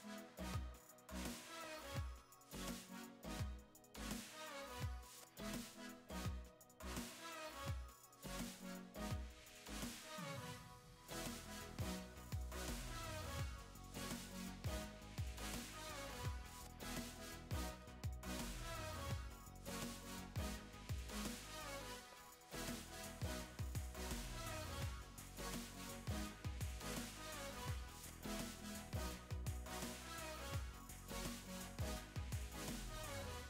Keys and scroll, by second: 2.9 shift+Left, 3.7 shift+Right, 7.2 shift+Left, 10.3 super+;, 11.7 Left, 14.8 super+;, 15.0 v, 15.3 super+s, 16.2 v, 21.1 super+t, 27.1 super+z, 27.2 v, 28.7 typing.